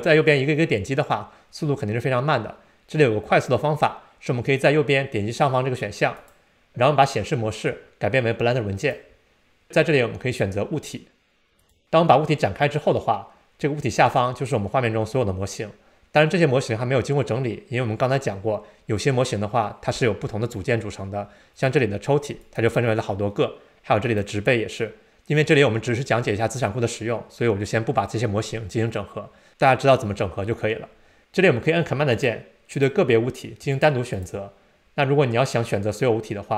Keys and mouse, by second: 6.2-9.0 drag, 22.4 click, 24.0 click, 32.2-33.0 super+drag, 33.8 super+click.